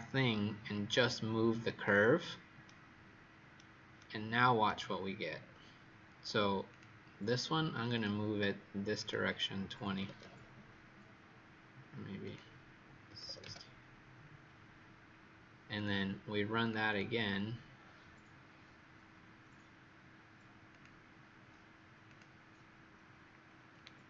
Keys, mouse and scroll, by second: 2.6 right click, 5.2-6.6 scroll down 3, 6.6 click, 9.8 KP_2, 9.9 KP_0, 10.2 KP_Enter, 12.2 click, 13.0 KP_6, 13.1 KP_0, 13.3 KP_Enter, 15.7 click, 16.8 click, 20.6 click, 23.6-24.0 scroll up 5.